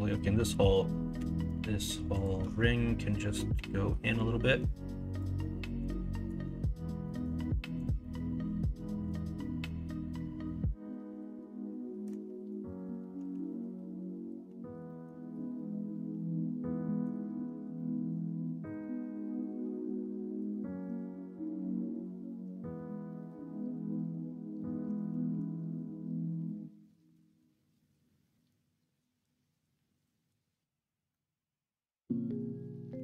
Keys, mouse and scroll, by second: 1.1 2, 4.1-7.0 drag, 7.0 middle click, 8.0 middle click, 8.5 middle click, 9.3-12.0 middle drag, 14.8 middle click, 16.1 middle click, 17.7 middle click, 23.8 middle click, 24.5 middle click, 24.8 Tab, 25.2 shift+a, 31.2-32.6 drag, 32.9 Tab.